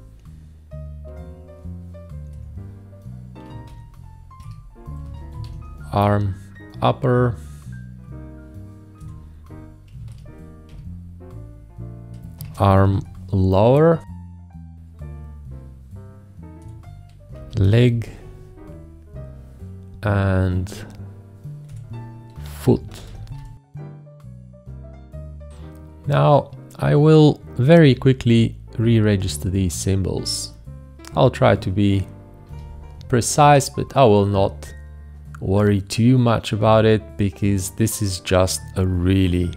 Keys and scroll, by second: 2.3 F8, 3.2-5.4 typing, 9.0 F8, 9.7-10.7 typing, 12.4 space, 12.8 shift+i, 16.6 F8, 17.1-18.3 typing, 21.6 F8, 22.5-23.9 typing, 27.8 typing, 32.4 ctrl+t, 38.9 ctrl+t.